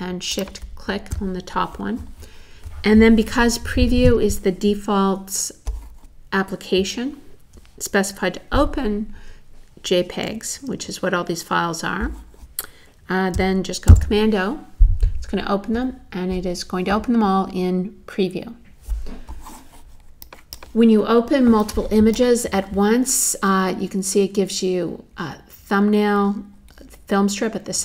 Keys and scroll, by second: 13.9 super+o.